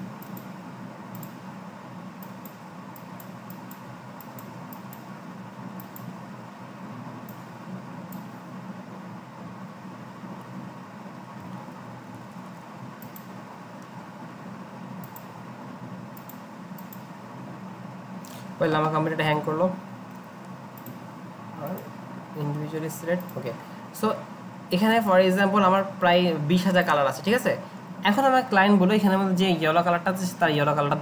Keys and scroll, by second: 12.1 ctrl+shift+g, 12.2 ctrl+shift+g.